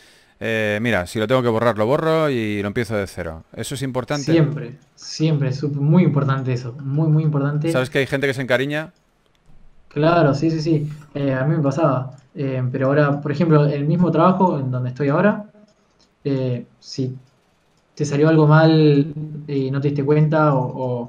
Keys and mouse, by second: 3.4 s, 4.6 s, 6.3 s, 7.6 a, 9.4 ctrl+s, 11.0 KP_3, 13.1 click, 13.5 g, 13.7 f, 13.9 f, 15.1 f, 17.0 f, 20.8 f.